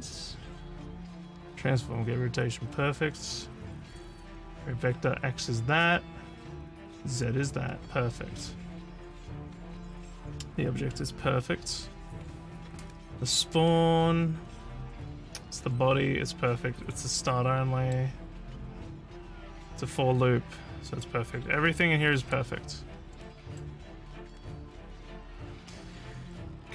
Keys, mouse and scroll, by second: 13.7-17.9 middle drag, 19.1-21.0 middle drag, 21.8 click, 23.2 middle click.